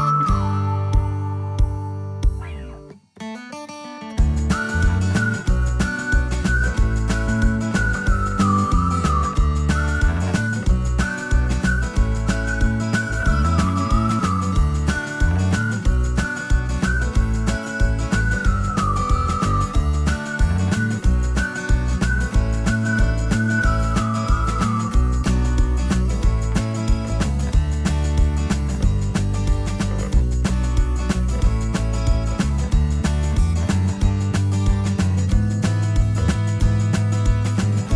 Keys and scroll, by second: 5.1 typing, 9.1-11.4 typing, 14.9 space, 18.6 s, 21.0-21.8 typing.